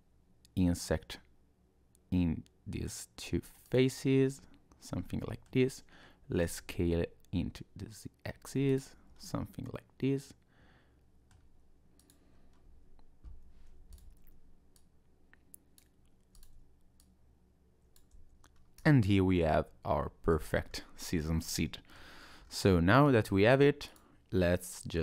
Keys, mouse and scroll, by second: 5.1 middle click, 6.4 s, 8.9 Tab, 9.1-9.5 scroll down 2, 9.5 middle click, 12.0 click, 12.3-12.6 scroll up 1, 12.6 Tab, 13.9 alt+click, 14.7 click, 16.3 alt+click, 17.0 click, 18.1 Tab, 18.5 scroll down 2, 18.8 click, 19.1 middle click, 20.4-20.8 scroll down 3, 21.4 middle click, 22.2-22.6 scroll down 2, 22.7 shift+middle click, 23.3-23.9 scroll up 2, 23.9 click.